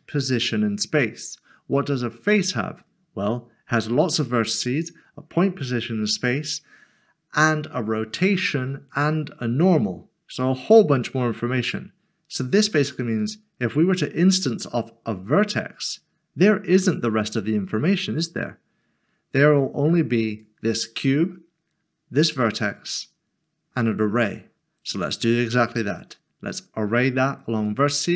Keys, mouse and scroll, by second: 20.3-21.3 scroll down 1, 21.3 click, 27.6 click.